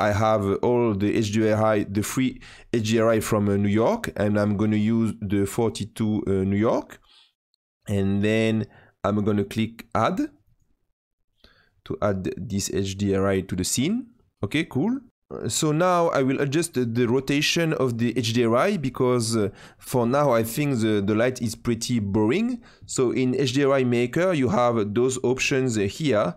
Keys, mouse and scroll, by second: 10.4 click.